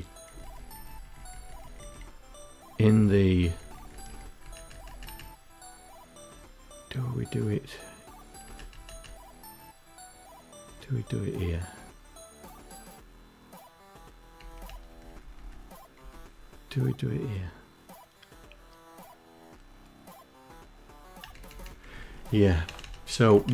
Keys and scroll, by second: 0.4 Down, 0.5 Down, 1.6 Down, 2.0 Down, 2.2 Down, 2.4 Down, 2.6 Down, 2.8 Down, 3.1 Up, 3.3 Up, 3.5 Up, 3.8 Up, 7.1 Up, 7.4 Up, 13.1 Up, 13.2 Up, 13.6 Down, 13.8 Down, 13.9 Down, 14.1 Down, 14.7 Down, 20.0 Up, 20.2 Up, 20.5 Down, 20.8 Down, 20.9 Down, 21.4 Up, 21.8 Up, 22.0 Down, 22.2 Up, 22.2 Down, 22.5 Down, 22.7 Down.